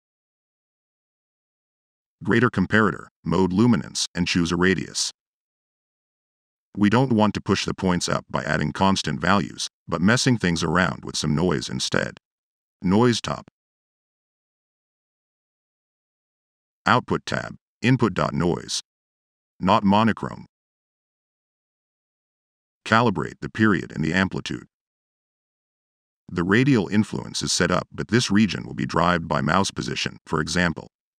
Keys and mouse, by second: 0.4 Tab, 6.4 Delete, 12.6 Tab, 13.7 Tab.